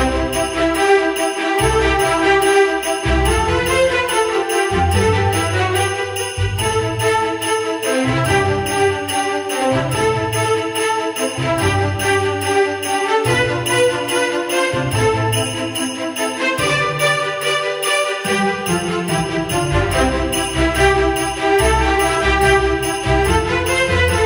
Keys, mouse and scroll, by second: 1.1 ctrl+z, 2.5 ctrl+z, 3.0 ctrl+z, 4.5 ctrl+z, 4.8 ctrl+z, 16.8 v, 17.8 ctrl+d.